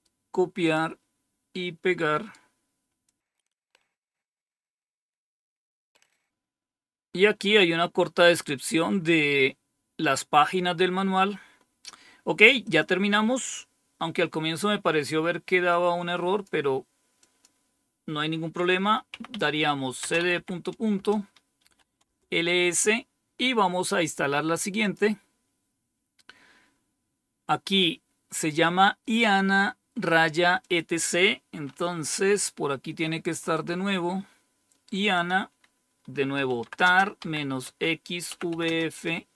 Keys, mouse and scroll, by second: 0.5 click, 3.0 click, 3.4 Right, 3.5 Return, 6.3 scroll down 4, 12.5 click, 15.6 click, 17.1 click, 19.0-20.2 typing, 20.8 Return, 21.3-22.2 typing, 24.7 click, 30.5 click, 32.9-33.4 scroll up 3, 35.0 click, 36.1-39.3 typing.